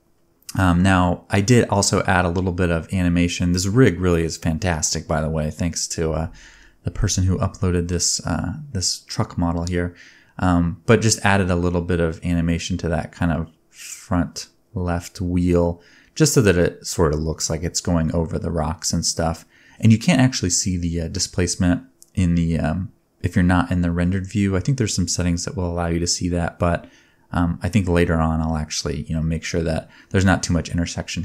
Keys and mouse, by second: 1.1 a, 3.5-6.9 shift+drag, 3.9 shift+d, 5.3 shift+d, 6.2 shift+d, 6.9 space, 8.3-9.6 shift+middle drag, 9.7 middle click, 13.2-15.4 middle drag, 14.8 space, 15.4 click, 15.6 middle click, 15.6 click, 15.8 middle click, 15.9-16.3 drag, 16.6 ctrl+Tab, 16.8 click, 16.8 middle click, 16.8 right click, 17.3 ctrl+s, 17.3 click, 17.7-19.3 shift+drag, 18.6-19.3 middle drag, 18.6-19.3 right drag, 22.5 middle click, 22.8 click, 23.5 shift+s, 24.6 shift+a, 25.2-31.2 drag, 26.5 g, 27.2 g, 28.5 F2, 30.0 shift+middle click, 30.0 shift+right click, 30.5 ctrl+p.